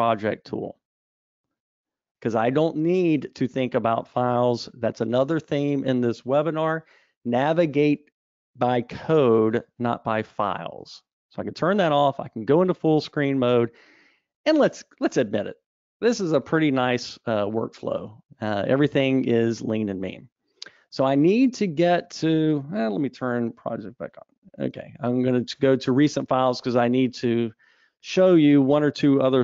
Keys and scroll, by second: 23.8 super+1.